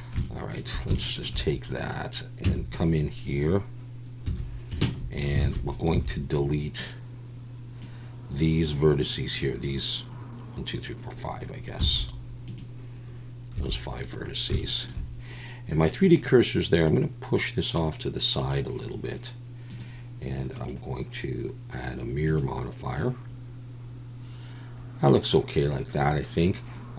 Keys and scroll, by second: 2.4 Tab, 4.2 1, 4.9 a, 5.4 alt+a, 5.9 b, 11.8 x, 13.5 a.